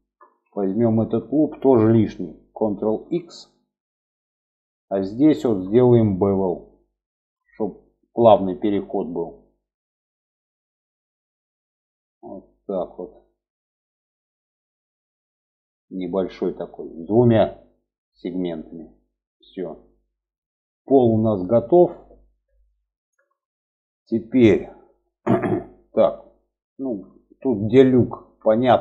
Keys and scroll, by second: 2.2 ctrl+x.